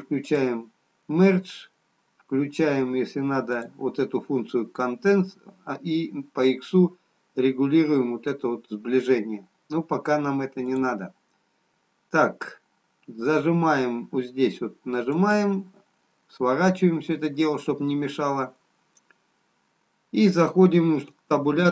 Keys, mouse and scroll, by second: 0.3 click, 0.3 scroll up 8, 3.6 click, 10.6 click, 16.3 click, 18.9 middle click.